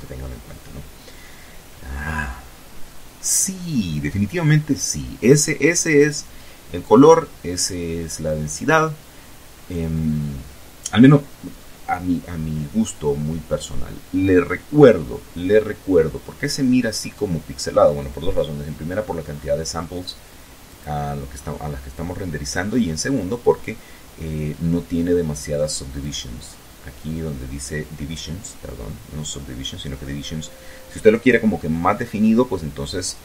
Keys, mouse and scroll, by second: 16.7 scroll up 2, 18.0 click, 18.7 scroll down 2, 20.0-20.5 scroll up 2, 20.5-20.9 scroll down 2, 21.5-22.2 scroll down 2, 23.4 click.